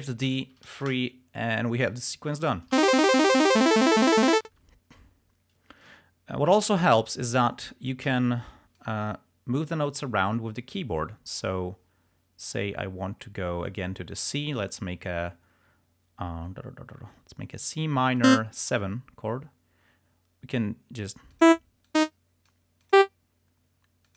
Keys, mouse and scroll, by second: 0.6 3, 0.9 Return, 2.5 click, 2.8 space, 4.6 space, 6.0 click, 6.8 ctrl+scroll up 2, 8.1 d, 8.9-10.0 drag, 18.3 click, 21.4 click, 22.0 click, 23.0 click.